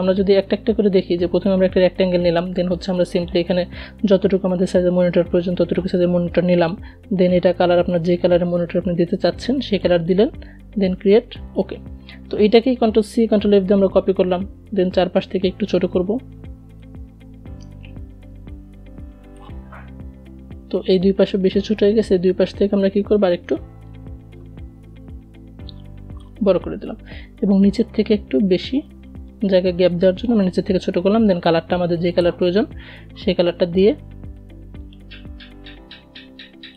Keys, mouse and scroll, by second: 11.2 ctrl+c, 11.5 ctrl+f, 12.2 v, 15.2-30.2 alt+drag, 32.7-36.2 drag.